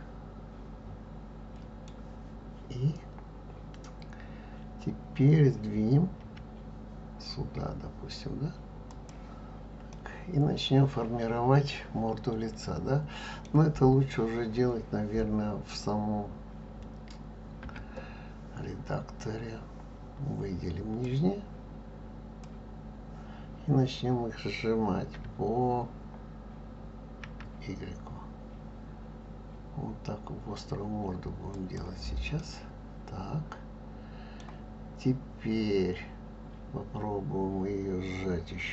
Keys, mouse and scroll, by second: 6.2 g, 9.9-12.9 middle drag, 17.6 Tab, 21.0 click, 25.2 s, 32.3-35.4 middle drag.